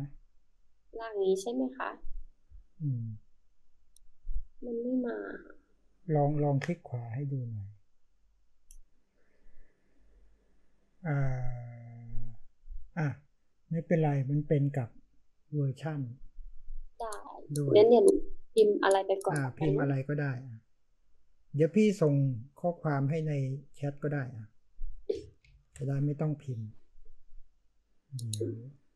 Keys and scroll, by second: 25.4 ctrl+c.